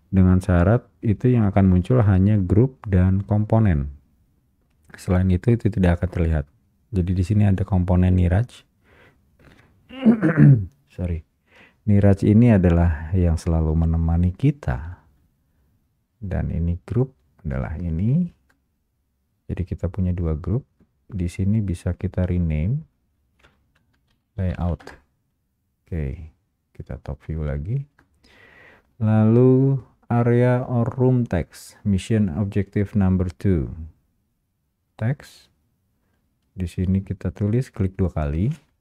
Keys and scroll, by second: 12.0 Return, 25.0 Return.